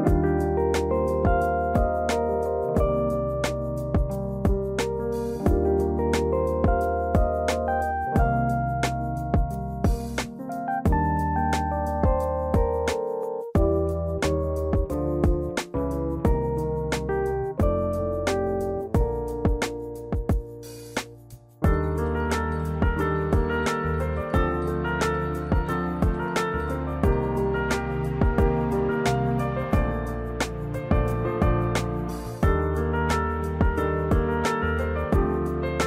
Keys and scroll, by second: 5.1 ctrl+space.